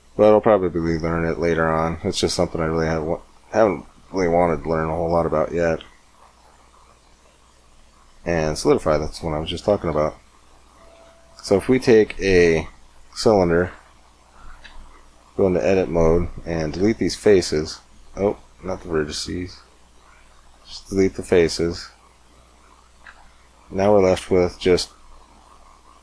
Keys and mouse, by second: 1.5-3.5 drag, 3.5 middle click, 4.0-7.4 drag, 7.4 middle click, 9.3-11.3 drag, 9.7 x, 10.7 shift+a, 14.5 Tab, 16.5 x, 18.3 ctrl+z, 18.3 ctrl+x, 19.9 x, 21.8 x, 22.9 Tab.